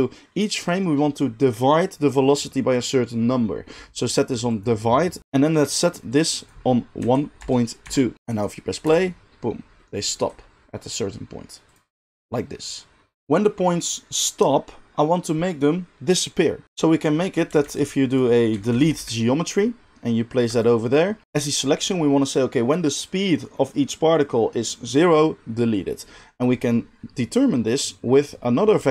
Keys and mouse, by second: 2.7-13.2 drag, 8.8 space, 13.2-27.8 middle drag, 17.6 shift+a, 27.8-28.9 drag.